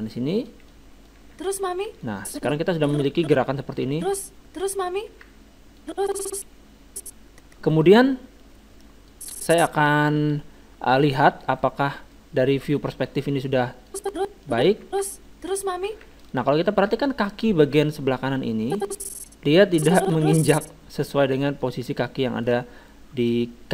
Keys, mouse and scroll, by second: 0.7-2.1 drag, 1.2 alt+a, 2.1 alt+a, 2.2-3.7 drag, 3.9 alt+a, 5.2 alt+a, 5.8-7.5 drag, 7.5 alt+a, 9.1-10.9 drag, 11.0-13.9 middle drag, 13.9-15.7 drag, 14.8 alt+a, 15.8 alt+a, 18.3 middle click, 18.6-20.3 drag, 21.1-23.7 middle drag.